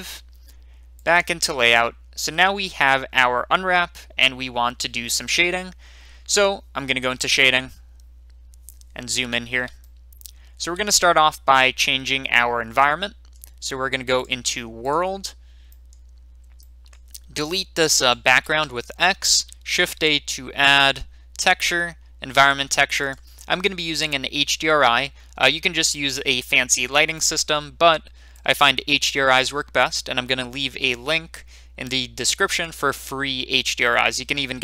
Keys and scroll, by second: 18.6 a, 19.8 x.